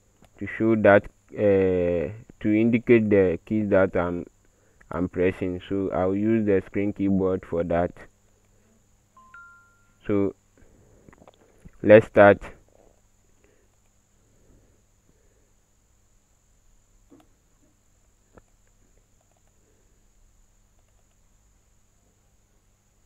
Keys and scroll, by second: 2.8 Pause, 3.0 Delete, 7.8 space.